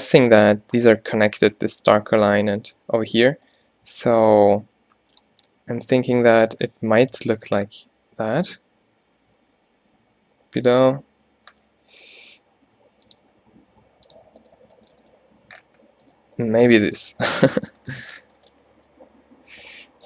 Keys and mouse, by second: 3.5-5.4 drag, 4.6 e, 5.4 e, 8.2 e, 8.7 click, 11.4 click, 12.8 e, 13.3 e, 14.7 shift+f, 16.4 e, 17.3 f, 17.8 Tab, 18.3 Tab, 18.7 a, 18.8 a.